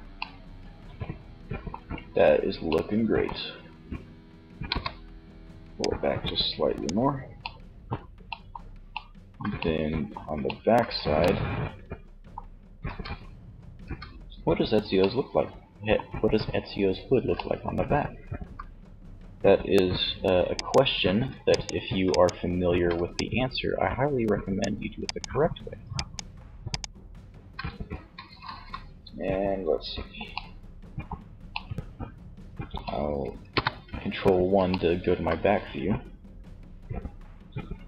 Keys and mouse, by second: 1.7 middle click, 3.7 KP_3, 17.4 e, 19.9-21.4 drag, 21.6 right click, 22.3 middle click, 23.0-27.7 right drag, 32.5 ctrl+KP_1, 35.5 e.